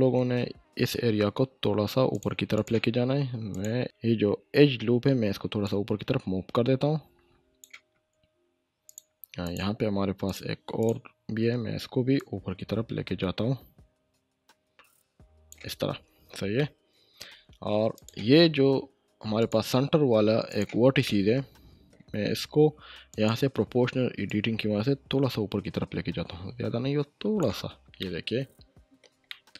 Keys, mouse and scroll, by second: 2.1 click, 3.8 ctrl+z, 5.6-7.8 drag, 12.2-15.6 drag, 15.9 Tab, 16.6-17.5 middle click, 17.3 Tab, 17.9 click, 21.0-22.0 shift+middle drag, 23.1-27.4 drag, 27.7 Tab, 27.8 scroll down 1, 28.0-29.2 middle drag, 29.3-29.5 shift+middle click.